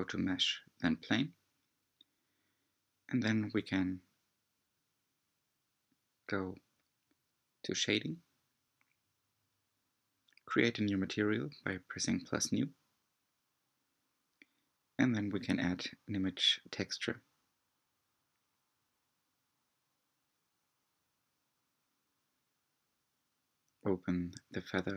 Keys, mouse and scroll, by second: 1.6-2.2 scroll up 4, 2.3-5.4 middle drag, 8.4-13.2 drag, 13.2 shift+middle drag, 13.5 click, 15.0-16.9 scroll down 9, 16.9-17.7 scroll down 1, 17.7-18.9 scroll down 1, 18.9-22.7 scroll down 1, 22.7-24.9 drag.